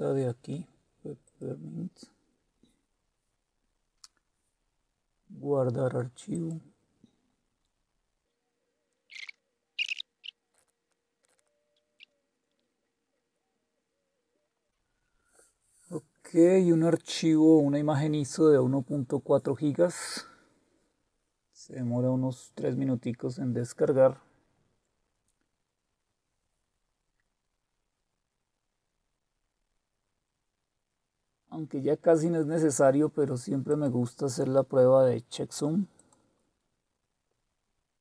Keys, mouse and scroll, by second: 1.2 click, 6.3 click, 8.5 click, 10.4 click, 10.5-11.4 typing, 11.2 click, 11.8 scroll down 1, 12.0 click, 12.3 click, 13.3 click, 14.6 click, 33.7 click, 36.0 click.